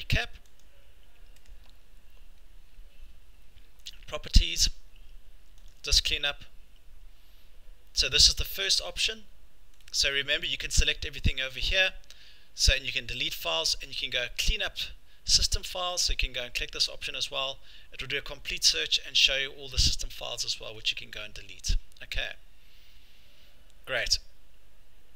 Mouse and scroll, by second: 0.6 click, 1.5 right click, 3.9 click, 10.5 click, 16.0 click, 21.0-21.6 scroll, 21.6-25.1 scroll.